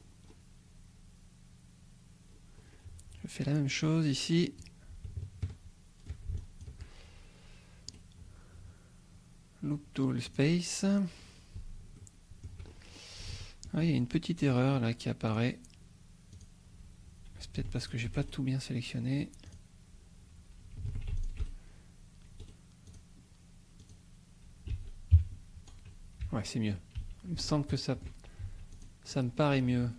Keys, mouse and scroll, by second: 2.2-2.9 scroll down 2, 3.9 click, 5.4 shift+click, 6.4 shift+click, 7.9 right click, 10.3 click, 11.2 scroll up 1, 12.0 shift+click, 12.6-13.2 shift+scroll up 1, 13.3 shift+click, 13.8 shift+scroll up 1, 15.4 click, 16.3 click, 17.8 alt+shift+click, 18.2 alt+shift+right click, 19.5 click, 20.9 alt+a, 21.2 alt+shift+click, 21.4 alt+shift+right click, 21.5 ctrl+alt+shift+c, 22.4 right click, 22.9 click, 23.8 click, 24.7 a, 25.2 KP_Decimal, 26.2 a, 26.7 scroll up 1, 26.9 a, 27.4 shift+click, 28.4 shift+a, 28.7 click, 29.0-29.6 scroll up 2.